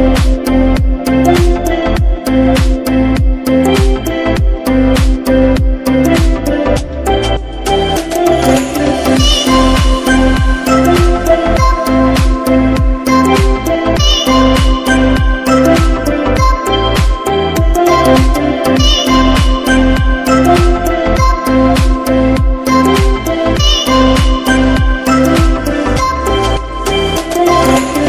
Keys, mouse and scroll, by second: 8.7 Right, 11.5 click, 12.6 Left, 13.2 Left, 14.6 click, 23.7 click, 25.9 shift+click.